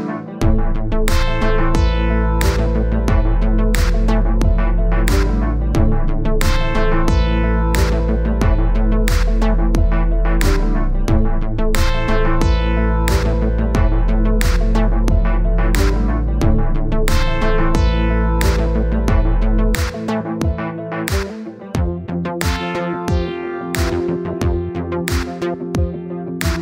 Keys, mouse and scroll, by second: 3.9 click, 7.2 middle click, 7.6-8.5 scroll up 1, 8.5 click, 10.0-11.2 drag, 11.7 middle click, 12.2 click, 13.1 click, 14.4 click, 17.2 click, 17.7-18.9 drag, 19.5 click, 20.7 click, 22.7 click, 23.1 click, 24.5 middle click, 25.4 click, 26.4 click.